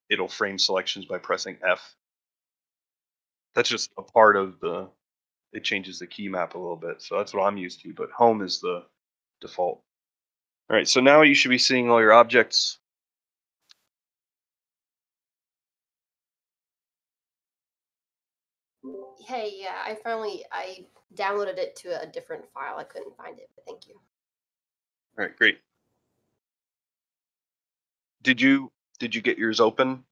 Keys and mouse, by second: 5.0-5.6 shift+middle drag, 5.7-6.9 shift+middle drag, 7.0 middle drag, 8.9 middle click, 12.3-14.1 middle drag.